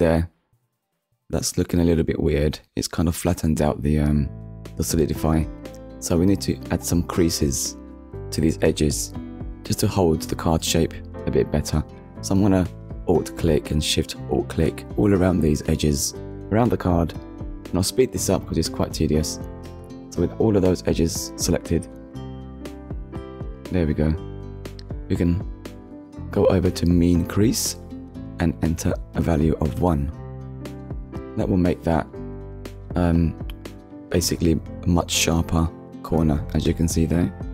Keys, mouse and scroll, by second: 1.0 middle click, 3.4 middle click, 4.4 shift+middle click, 5.6 click, 5.9 Tab, 6.7 click, 8.6 click, 10.0 click, 11.0-11.4 scroll up 1, 13.3 alt+click, 14.7 alt+shift+click, 15.4 alt+shift+click, 16.3 alt+shift+click, 17.1 click, 17.5 alt+shift+click, 17.9 middle click, 18.2 alt+shift+click, 18.4 alt+shift+click, 18.7 middle click, 18.8 scroll up 1, 18.9 alt+shift+click, 19.1 alt+shift+click, 19.2 alt+shift+click, 19.3 middle click, 19.6 alt+shift+click, 19.8 middle click, 20.0 alt+shift+click, 20.2 alt+shift+click, 20.4 alt+shift+click, 20.5 middle click, 20.7 alt+shift+click, 21.2 ctrl+middle click, 21.3 shift+middle click, 21.5 shift+middle click, 21.9 alt+shift+click, 22.2 alt+shift+click, 22.5 middle click, 23.1 alt+shift+click, 23.2 alt+shift+click, 23.4 alt+shift+click, 24.3 alt+shift+click, 24.9 middle click, 25.5-25.9 scroll down 2, 26.0 shift+middle click, 26.5 middle click, 28.0 click, 29.2 1, 29.6 Return, 30.6 shift+middle click, 32.6 click, 33.8 click, 34.3 middle click, 35.1 scroll up 1, 36.2 Tab.